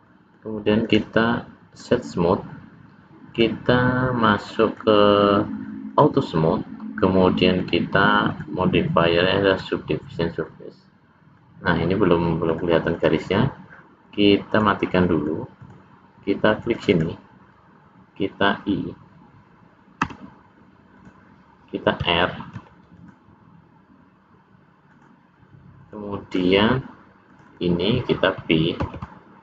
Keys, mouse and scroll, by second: 0.0 middle click, 0.7 right click, 3.2 click, 4.6 click, 5.8 click, 7.5 click, 8.2 click, 10.4 middle click, 12.4 click, 14.4 click, 15.0 middle click, 15.5 click, 16.7 click, 16.9 click, 20.0 i, 22.5 ctrl+r, 25.8 middle click, 27.2 click, 27.4 click, 28.8 ctrl+b.